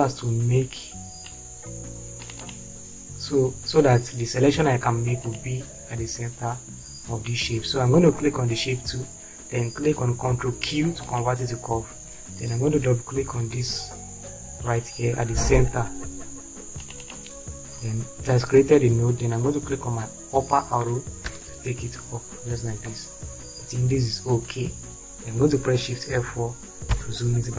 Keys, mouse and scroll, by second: 21.3 Up, 27.3 shift+F4.